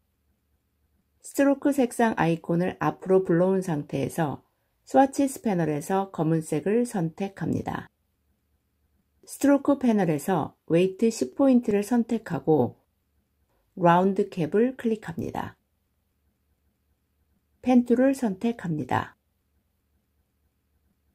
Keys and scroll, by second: 17.7 p.